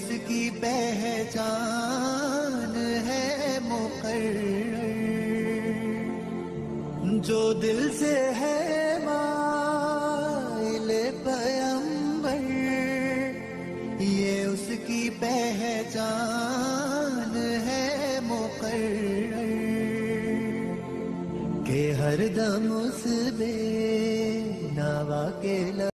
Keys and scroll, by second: 2.9 shift+Page_Down, 4.5 ctrl+Page_Up, 8.5 Escape, 9.5 F4, 16.3 Escape, 16.7 F3, 18.7 Return, 19.5 shift+F2, 20.5 F9.